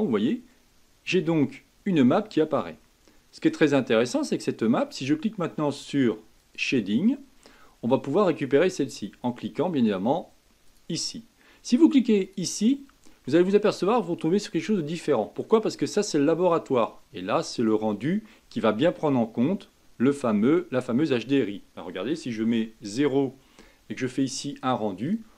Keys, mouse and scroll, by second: 0.3-3.3 middle drag, 6.4-10.9 drag, 12.2 click, 13.2-17.6 middle drag, 17.6 click, 18.3-21.3 middle drag, 22.4 KP_0.